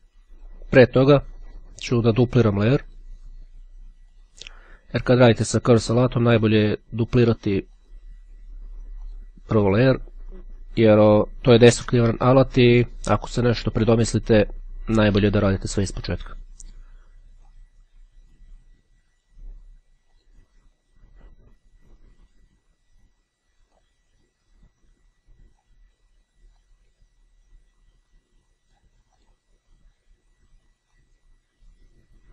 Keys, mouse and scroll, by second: 1.6 click, 3.0 click, 4.2 click, 7.9 click, 8.7-9.8 drag, 15.8-18.1 drag, 20.3 click, 22.0-24.4 drag, 25.0-26.2 drag, 26.8-29.4 drag, 30.9-32.3 drag.